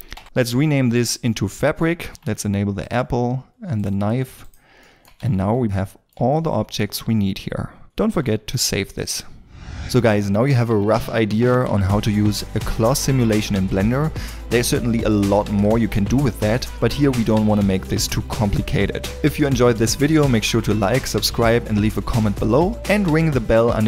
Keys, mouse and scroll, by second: 0.1 Return, 1.9 scroll down 1, 2.1-4.8 scroll up 1, 4.8 shift+middle click, 5.2 middle click, 5.2 shift+a, 6.8 shift+middle click, 7.8 middle click, 8.1 ctrl+s.